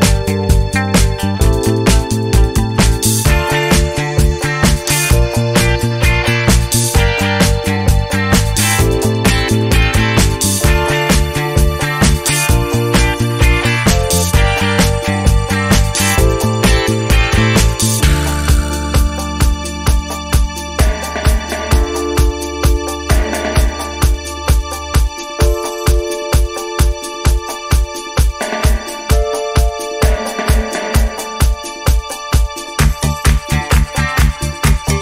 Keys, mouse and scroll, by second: 0.5 ctrl+scroll up 2, 4.8-7.1 drag, 9.0 click, 10.2 click, 11.6 click, 13.7 Down, 15.3 Up, 16.6 alt+Down, 19.0 alt+Down, 27.2 alt+Down, 30.5 alt+click, 34.0 click.